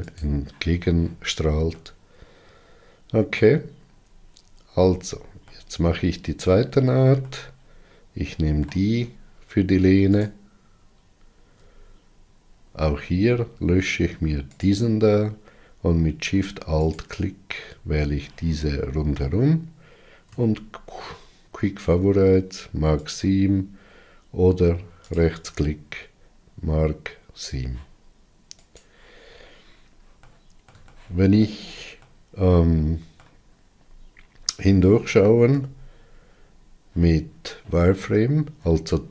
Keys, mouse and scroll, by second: 0.0-1.7 drag, 1.7-3.8 middle drag, 3.8-5.2 scroll up 8, 5.4-10.2 middle drag, 10.2 alt+click, 12.6-13.1 scroll up 6, 14.5 shift+click, 16.9 alt+shift+click, 23.1 q, 28.7 click, 29.4-30.0 scroll down 9, 30.2-33.6 middle drag, 33.6-34.5 scroll up 7.